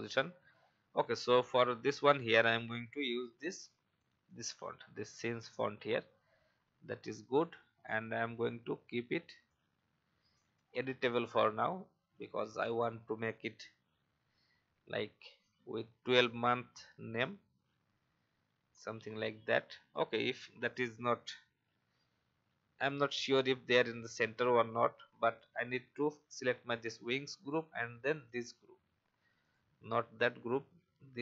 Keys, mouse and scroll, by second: 0.2 alt+scroll down 1, 1.7 click, 3.5 i, 4.2 click, 4.8 typing, 5.5-7.5 drag, 7.7-8.0 alt+scroll up 1, 9.5-11.3 alt+shift+drag, 15.2 alt+scroll up 1, 16.4 alt+shift+click, 18.3 Up, 19.5 alt+scroll down 1, 20.6 click, 23.0 alt+scroll up 1, 25.2 click, 28.3 shift+click, 29.4 shift+click.